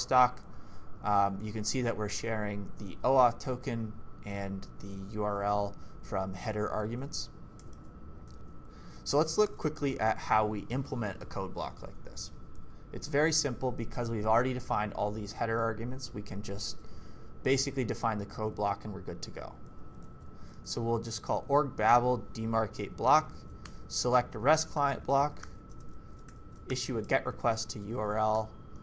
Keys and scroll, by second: 1.4 j, 2.3 j, 4.3 j, 4.7 k, 7.6 ctrl+c, 9.4 shift+g, 9.9 k, 11.2 o, 17.7 ctrl+c, 19.7 ctrl+v, 20.1 d, 22.8-28.8 typing, 23.6 Return.